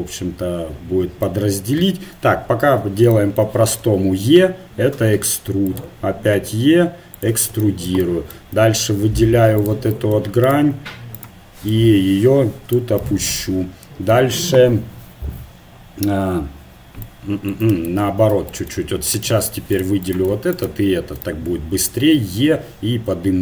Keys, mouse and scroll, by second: 2.2 KP_1, 3.8 e, 5.9 e, 8.6 ctrl+Tab, 10.5-11.9 right drag, 11.7-13.1 drag, 12.0 right click, 13.1 right click, 18.1 ctrl+z, 19.3 ctrl+Tab, 20.0-22.2 right drag, 22.4 e.